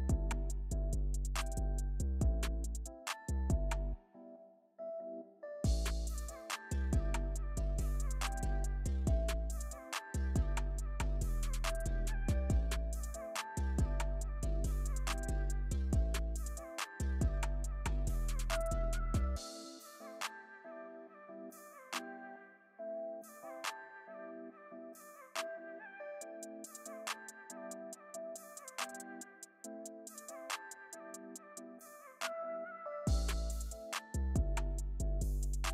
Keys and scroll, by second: 0.0 alt+super+z, 1.9 alt+super+z, 2.1 alt+super+z, 10.8 alt+super+z, 29.1 alt+super+z, 29.6 alt+super+z, 30.3 alt+super+z, 31.1 alt+super+z, 31.4 alt+super+z, 31.6 alt+super+z, 32.0 alt+super+z, 32.7 alt+super+z.